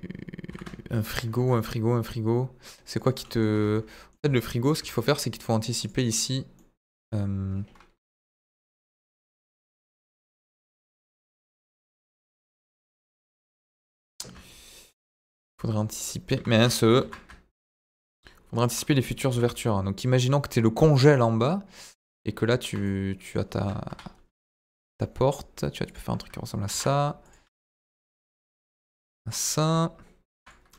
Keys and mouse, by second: 0.4 s, 1.3 middle click, 2.9 ctrl+click, 3.2 middle click, 3.5 Tab, 3.7 middle click, 4.2 Tab, 4.3 middle click, 4.7 Tab, 5.8 click, 6.2 click, 6.5 middle click, 7.9 KP_1, 8.8 ctrl+r, 10.7 Escape, 14.0 ctrl+z, 15.2 ctrl+r, 16.3 Escape, 16.9 ctrl+z, 17.7 ctrl+r, 18.6 Escape, 19.2 s, 19.3 middle click, 21.1 click, 22.8 middle click, 23.8 KP_1, 24.6 g, 24.7 middle click, 25.8 click, 26.6 ctrl+r, 27.4 Escape, 27.7 s, 27.8 middle click, 29.3 click, 30.3 ctrl+r.